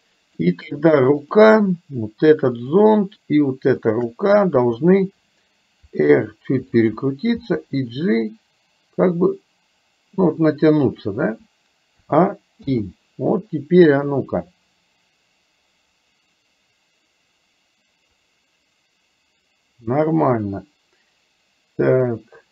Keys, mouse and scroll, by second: 3.9 shift+click, 6.1 r, 7.6 g, 12.1 a, 12.7 i, 14.1-22.5 drag.